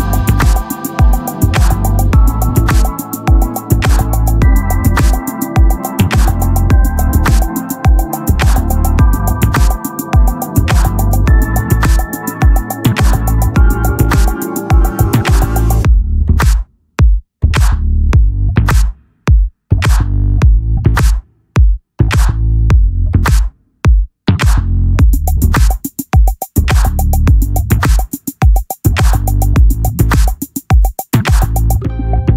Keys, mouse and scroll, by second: 2.0 s, 3.9 shift+d, 5.3 s, 6.3 s, 7.9-12.2 drag, 10.0 s, 12.5 s, 14.7-15.9 drag, 15.9-17.2 middle drag, 16.4 s, 17.2-19.4 drag, 19.4 Tab, 19.7 Tab, 20.3 s, 22.4 s, 23.0 s, 25.8 Tab, 26.2 Tab, 27.1 shift+d, 29.3 click, 30.2-32.3 middle drag.